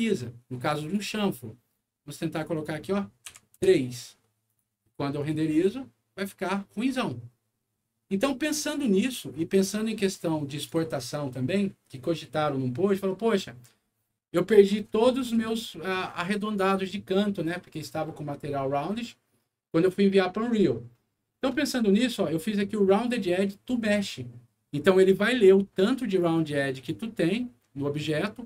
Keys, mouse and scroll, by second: 0.1 middle click, 0.8 click, 2.3 click, 2.5 click, 3.2 Page_Down, 3.7 Return, 4.4 click, 5.2 click, 8.7 click, 10.1 click, 25.5 click, 26.7 click.